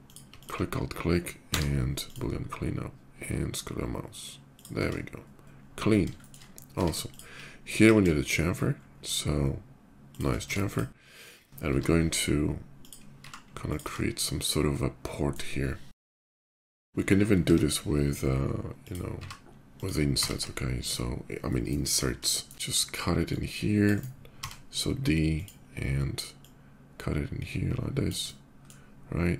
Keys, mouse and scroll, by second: 0.1 alt+click, 0.3 alt+middle click, 1.2 middle click, 1.2 y, 1.8 click, 4.3 click, 4.6 Tab, 4.9-5.5 middle drag, 5.6 scroll down 1, 5.9 shift+middle drag, 6.5 Tab, 6.5 middle click, 6.7 click, 7.5 ctrl+b, 8.5 middle click, 9.9 shift+click, 10.1 Tab, 10.3 click, 11.4 i, 12.5 click, 12.9 e, 13.4 click, 14.1 click, 14.1 s, 14.7 middle click, 15.7 i, 16.2 click, 16.2 e, 16.3 ctrl+b, 16.6 click, 17.1 i, 18.6 click, 18.9 e, 19.5 click, 19.9 Tab, 19.9 middle click, 20.2-21.5 middle drag, 22.0 shift+middle click, 22.9-23.6 drag, 23.7 right click, 24.3 d, 25.0 click, 26.0-27.8 drag, 28.0-28.4 middle drag.